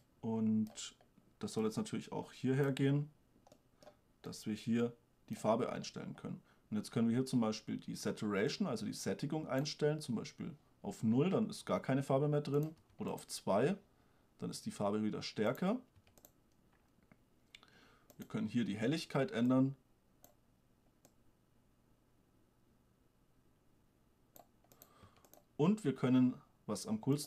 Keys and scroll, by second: 13.0 2, 16.2 1, 25.2 1.